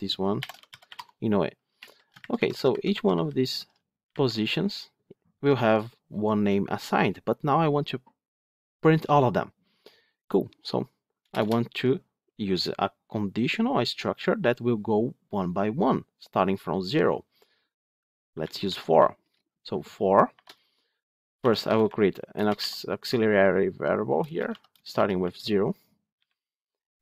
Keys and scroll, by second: 2.1 ctrl+shift+Left.